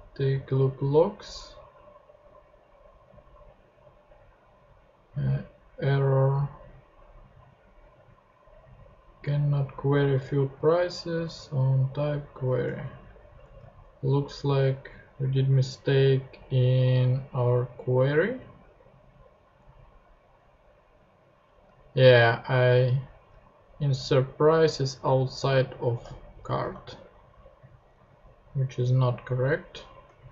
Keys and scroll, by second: 12.6 super+Tab, 25.5 super+x, 26.3 super+Left, 26.6 super+BackSpace, 27.5 BackSpace, 27.9 Return.